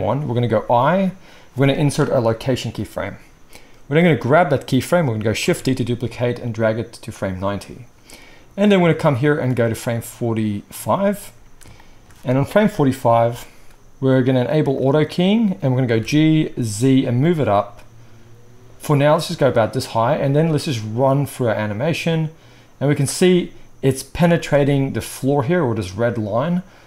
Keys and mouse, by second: 0.8 i, 5.4 shift+d, 7.2-8.7 middle drag, 8.7-14.8 drag, 14.8-20.6 middle drag, 16.0 g, 20.6-26.8 drag.